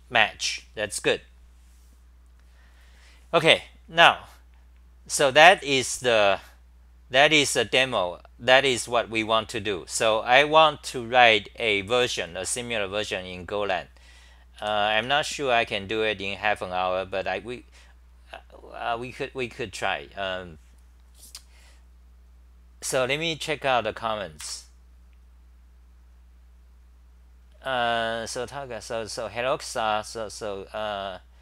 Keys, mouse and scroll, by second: 5.4-6.9 scroll up 1, 6.9-8.1 scroll up 4, 8.1-8.9 scroll up 3, 14.6 ,, 14.9 Home.